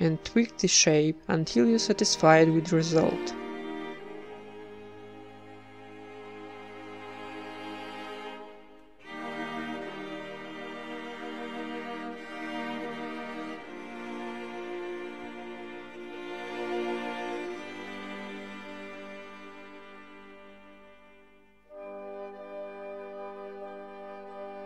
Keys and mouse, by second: 0.9 ctrl+b, 4.6 a, 4.9-5.9 drag, 5.2 g, 5.9 alt+s, 6.7-8.9 middle drag, 7.0 ctrl+r, 7.9 z, 8.4 z, 8.9 z, 9.5 ctrl+Tab, 10.1 click, 10.7 ctrl+KP_Add, 11.0 ctrl+KP_Add, 11.0 ctrl+KP_Add, 11.2 ctrl+KP_Add, 11.6 KP_1, 12.1 s, 13.1 g, 14.0 s, 15.5 g, 16.2 middle click, 16.5 ctrl+KP_Add, 16.9-23.7 typing, 17.7 click, 17.9 Tab, 18.5 ctrl+2, 18.6 click, 19.4 Tab, 21.0 click, 21.1 right click, 21.6 middle click, 23.4 right click, 24.5 Tab, 24.6 Tab.